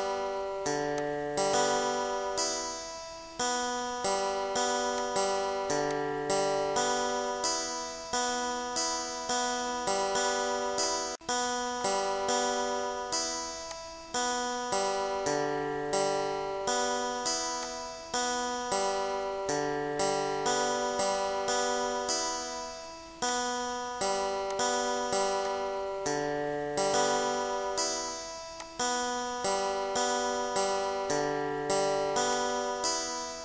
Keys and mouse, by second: 1.0 click, 1.6 click, 5.0 click, 5.9 click, 10.1 click, 10.9 click, 11.8 click, 12.9 click, 13.7 click, 17.7 click, 20.7 click, 23.3 shift+click, 24.5 shift+click, 25.5 click, 26.5 click, 28.1 click, 32.3 click.